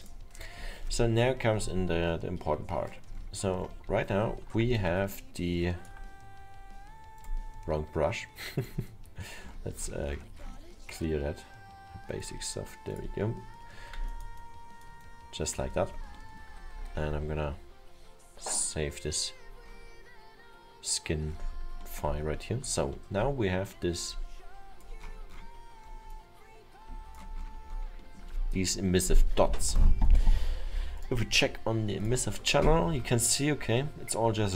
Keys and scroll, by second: 17.8 ctrl+s.